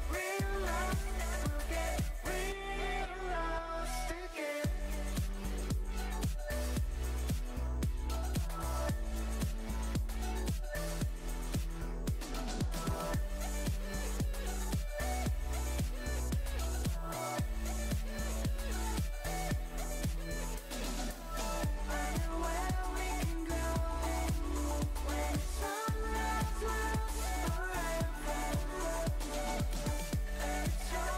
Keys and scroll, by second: 1.3 space, 17.7 space.